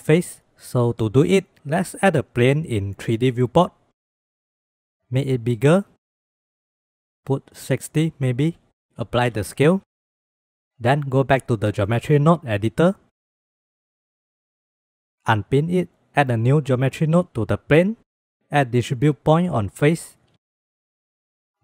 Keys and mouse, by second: 0.8 shift+a, 3.5 click, 4.8 click, 5.0 s, 6.8-8.7 drag, 9.4 ctrl+a, 11.7-12.7 drag, 13.4 click, 14.3 click, 15.6 click, 16.7 click, 18.6 shift+a.